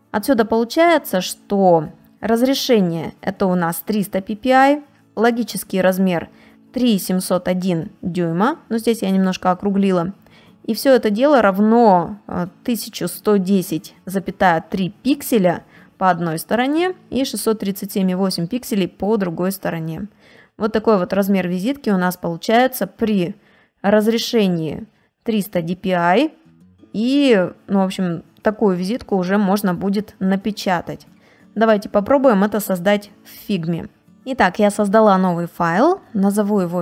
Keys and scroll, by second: 19.5 space, 22.8 space, 26.5 ctrl+space, 26.9 ctrl+space, 28.4 ctrl+space, 28.9 ctrl+space, 35.8 d.